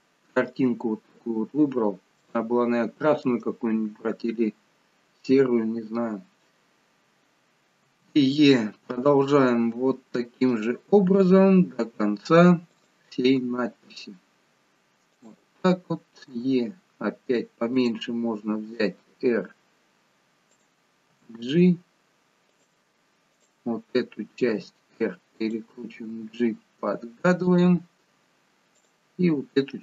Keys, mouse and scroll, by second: 1.8 scroll down 1, 2.3 shift+middle click, 7.8 e, 11.3 r, 13.3 g, 16.3 e, 18.7 r, 21.1 g, 23.3 click, 24.5 r, 26.0 g, 28.8 click.